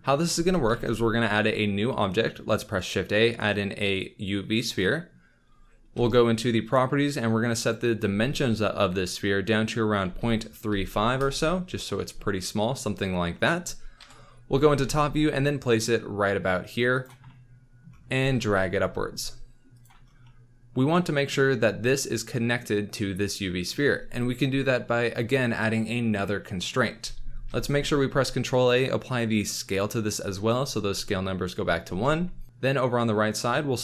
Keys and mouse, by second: 0.7 shift+a, 5.9 n, 7.5-11.2 drag, 14.0 KP_7, 14.8 g, 18.1 g, 18.2 z, 20.2 click, 27.5 ctrl+a, 32.0 n.